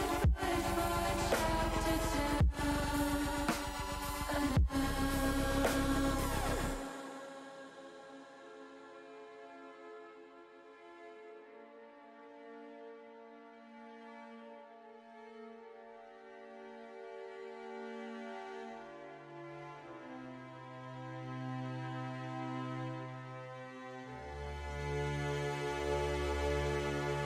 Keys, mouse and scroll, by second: 1.6 middle click, 1.9 middle click, 2.4 middle click, 2.6 middle click, 3.1 click, 5.4-8.7 drag, 11.8 click, 12.7 click, 18.4 click, 20.2 click, 23.2-24.3 middle drag, 24.5 middle click, 26.5 KP_0.